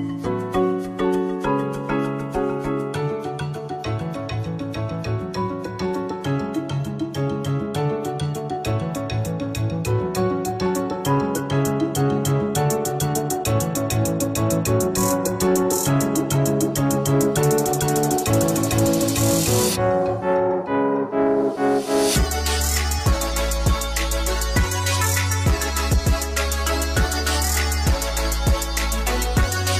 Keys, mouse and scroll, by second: 3.3 middle click, 3.6 click, 5.6 click, 5.7 middle click, 5.8 KP_0, 5.9 z, 6.2 z, 6.2 scroll up 1, 6.3 z, 6.5 middle click, 6.6 click, 9.7 middle click, 10.3 click, 10.4 middle click, 11.3 click, 11.4-14.2 typing, 11.5 click, 12.1 shift+click, 12.2 right click, 12.3 ctrl+z, 12.4 right click, 13.6 Escape, 13.6 click, 14.0 middle click, 14.6 middle click, 15.0 click, 15.4 z, 15.6 click.